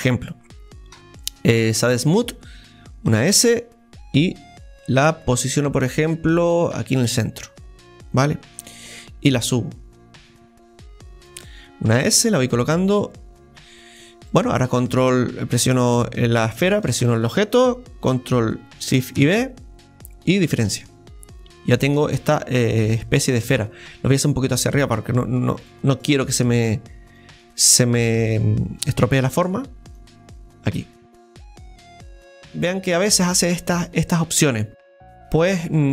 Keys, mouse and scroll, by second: 7.4-9.5 middle drag, 9.5-12.0 drag, 12.0 s, 14.0-16.7 drag, 16.6-19.2 shift+right drag, 21.0-24.8 middle drag, 24.8-26.2 drag, 27.1 right click, 27.7 right click, 28.8 right click, 29.9-33.0 drag.